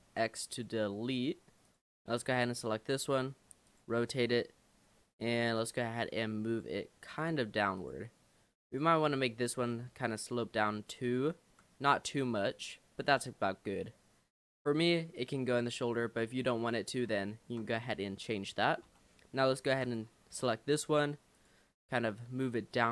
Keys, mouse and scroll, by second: 0.1 x, 1.7 click, 3.6 r, 4.2 g, 5.9 r, 7.1 g, 8.7 click, 9.2 l, 9.6 l, 10.4 r, 11.5 g, 13.2 click, 13.5-14.9 middle drag, 14.9 scroll down 2, 15.0-16.7 middle drag, 16.7 click, 17.3-18.9 shift+middle drag, 18.9 l, 19.7 shift+d, 20.4 r, 21.8 g.